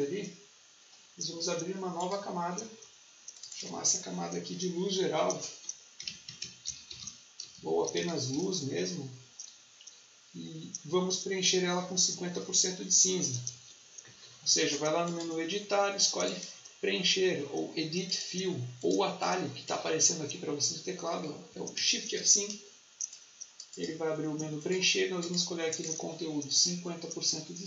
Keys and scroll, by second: 5.6-8.5 typing, 13.3 shift+F5, 21.2 Escape, 22.1 shift+F5.